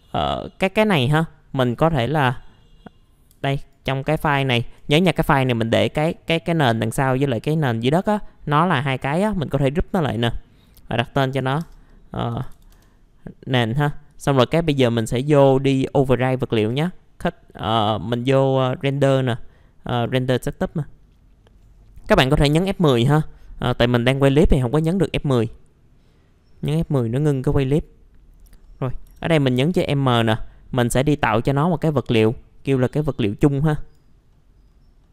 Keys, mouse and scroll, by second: 3.3 F4, 3.5 click, 4.4 ctrl+click, 9.5 click, 11.4-13.0 typing, 14.1 right click, 14.7 click, 28.6 middle click, 29.0 typing, 32.9 click, 34.3 middle click, 34.6 scroll down 1, 35.0 middle click.